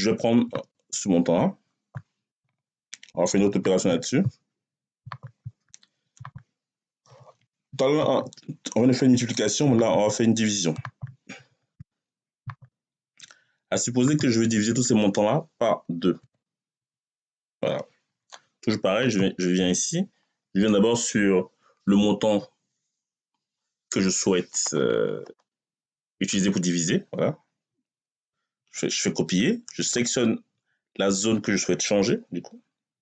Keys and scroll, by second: 6.9 Right, 16.0 2, 17.3 Return, 28.0 ctrl+c.